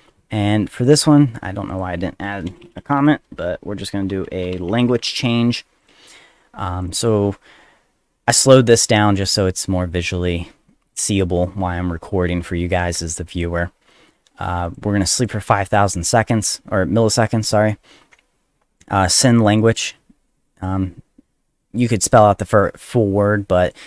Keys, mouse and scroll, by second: 1.7 click, 2.5-5.7 typing, 5.8 click, 6.8 click, 7.0 click, 14.6 click, 15.0 click, 15.2 click, 19.4 click, 19.5 click, 23.6 click.